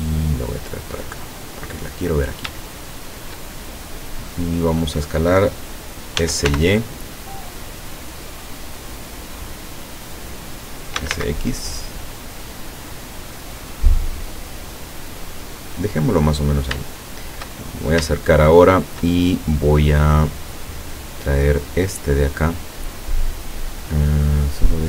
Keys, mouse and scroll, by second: 0.1-2.5 drag, 2.6 shift+middle click, 6.2 s, 6.5 y, 10.1 click, 10.8-11.6 typing, 15.7 click, 16.1-16.8 scroll up 2, 16.8 shift+scroll up 1, 17.0 shift+middle click, 17.7-18.1 shift+scroll up 3, 18.4 shift+middle click, 21.7 right click, 24.2-24.7 scroll down 4.